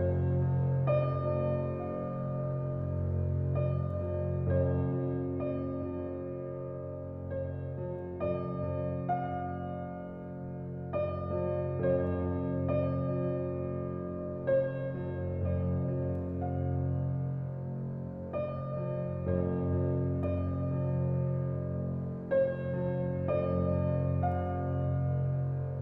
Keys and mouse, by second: 0.3 ctrl+alt+click, 1.2 alt+click, 1.5-4.8 middle drag, 4.8 alt+drag, 5.1-6.1 alt+middle drag, 6.1-8.6 alt+drag, 10.4-12.2 drag, 12.4-13.6 alt+drag, 13.7 Tab, 14.1-18.3 alt+drag, 19.4 alt+click, 20.7 typing, 22.1-24.3 alt+drag, 23.9 ctrl+z, 24.3 ctrl+z.